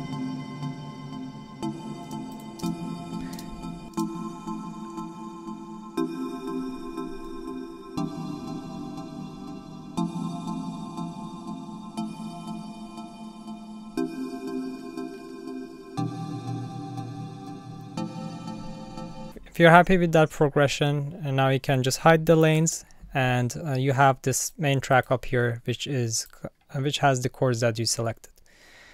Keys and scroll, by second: 2.0 space, 3.9 space, 22.6 alt+super+u.